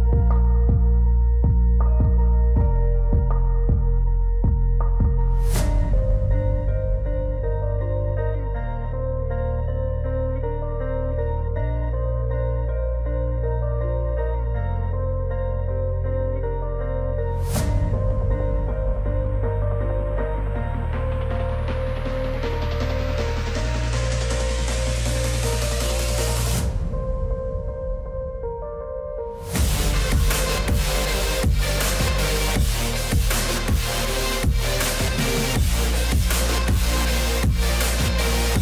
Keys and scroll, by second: 3.3 ctrl+z, 18.4 ctrl+s.